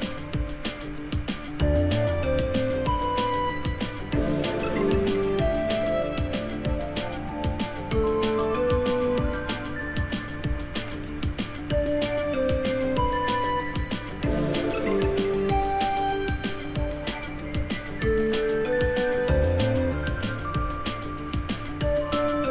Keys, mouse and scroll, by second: 0.0-2.1 drag, 3.2-3.8 scroll down 2, 3.8-4.5 scroll down 1, 4.5-5.2 scroll down 1, 5.2-6.8 scroll down 1, 6.8-7.8 scroll down 1, 7.8 scroll up 2, 10.9 click, 15.9 click, 19.8-21.8 scroll down 2.